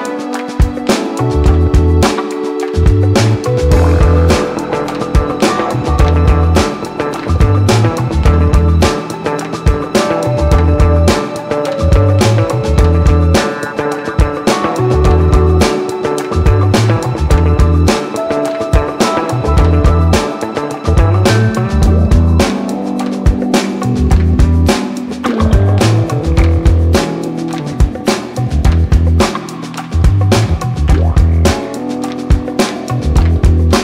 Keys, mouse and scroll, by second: 0.1 click, 2.6 space, 21.5 click, 22.1 space, 27.1 click, 28.2 ctrl+s, 30.3 click, 32.3 scroll down 1, 33.3 click, 33.6 click.